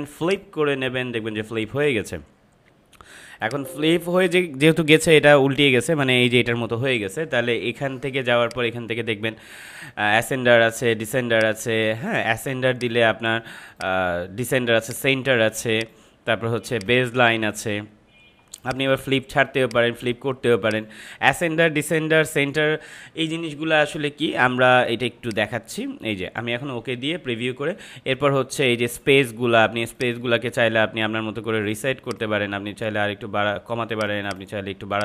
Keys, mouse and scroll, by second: 3.4-7.6 drag, 8.4 click, 11.3 click, 25.2 click, 29.9 click, 31.0-32.0 scroll down 1, 32.0-35.0 drag.